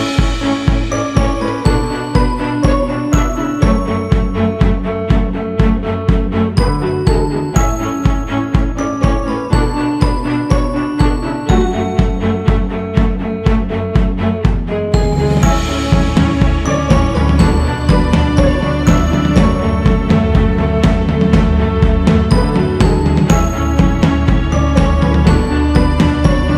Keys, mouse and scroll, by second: 0.8-4.5 drag, 4.5 g, 5.6-11.2 drag, 11.2 scroll down 4, 12.7 click, 13.3-14.0 scroll down 3, 14.0-15.3 scroll up 6, 15.3 shift+c, 16.0 f, 17.4-18.8 drag, 18.8-19.3 scroll down 4, 19.6-20.5 scroll up 3, 20.5-22.6 drag, 22.6-23.3 scroll up 2, 23.8-25.6 drag, 25.6-26.0 scroll down 1, 26.4-26.5 scroll down 3.